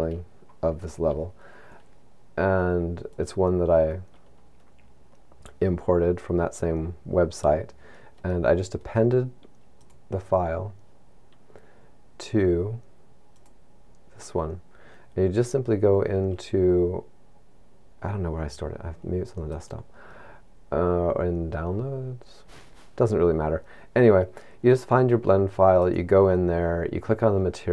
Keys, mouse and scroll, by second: 3.5 click.